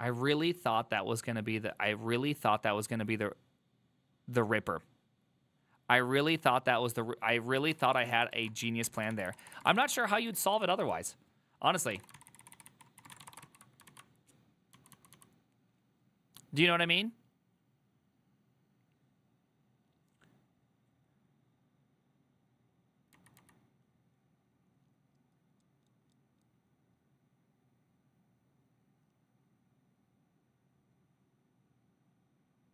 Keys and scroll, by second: 7.9 ctrl+c, 8.1 ctrl+c, 8.2 ctrl+c, 8.4 ctrl+a, 8.9-15.3 typing, 9.2 ctrl+c, 9.5 ctrl+c, 14.0 ctrl+u.